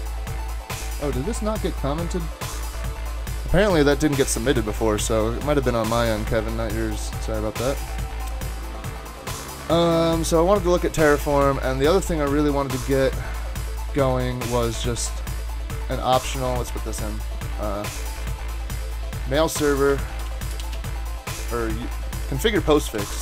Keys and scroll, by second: 19.3-21.1 typing, 21.9 super+a, 22.4-23.2 typing.